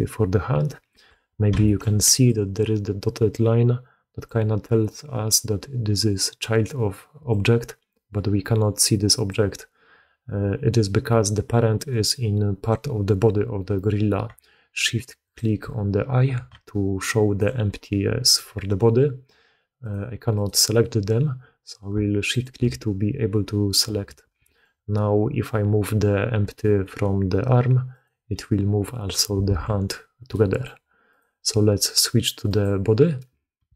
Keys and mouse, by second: 1.0 d, 1.6 shift+click, 2.0 d, 4.2 d, 4.2 d, 7.2-9.2 drag, 9.2 d, 9.3 d, 9.4 d, 16.5 d, 16.6-17.4 drag, 19.8 click, 22.2 shift+click, 24.2 alt+a, 24.5-26.8 drag, 26.8 g, 29.4 alt+a, 30.3-30.6 drag.